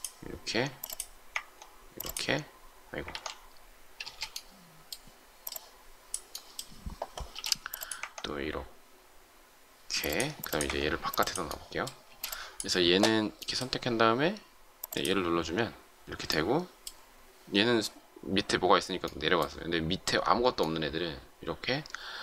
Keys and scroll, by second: 3.0 ctrl+z, 3.9 space, 7.3 m, 12.0 space.